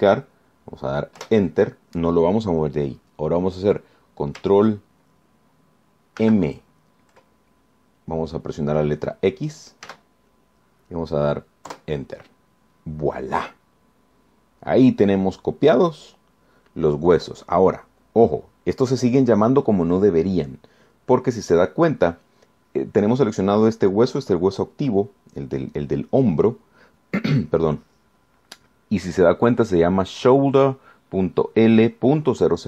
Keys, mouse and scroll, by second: 2.4 Return, 7.4 ctrl+m, 11.1 x, 12.9 KP_Enter.